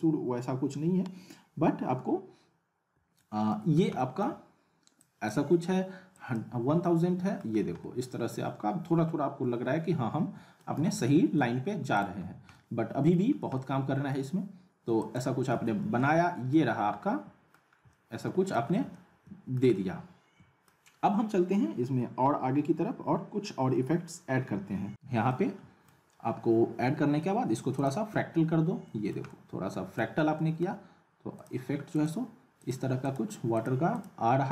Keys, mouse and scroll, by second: 2.9 click, 3.2-3.8 alt+middle click, 5.0 click, 6.8-7.4 middle click, 7.7 scroll down 1, 7.8-10.6 alt+middle drag, 10.8 z, 11.0-11.6 alt+middle click, 11.9 click, 12.2 scroll up 1, 12.6-13.1 alt+middle click, 13.3 scroll up 1, 13.6-14.2 alt+middle drag, 15.0 click, 15.5 z, 16.0-16.6 alt+middle click, 16.7 scroll up 1, 17.0-17.6 alt+middle click, 17.7 scroll up 1, 17.9-18.5 alt+middle click, 18.7 scroll up 1, 18.9-19.6 alt+middle drag, 25.2 middle click, 25.3-25.9 alt+middle drag, 27.7 click, 28.8 middle click, 31.4 click.